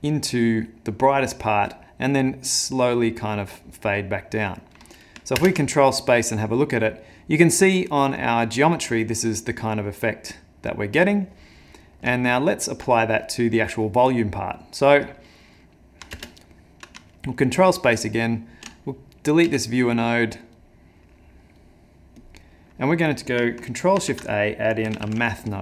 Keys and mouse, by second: 4.7 middle click, 5.5 ctrl+space, 11.8 middle click, 12.2 ctrl+middle click, 14.4 middle click, 15.0 click, 15.4 middle click, 16.1 ctrl+space, 17.2 ctrl+middle click, 17.8 middle click, 18.9 click, 19.5 x, 20.6 click, 21.6 click, 22.2 click, 24.0 ctrl+shift+a.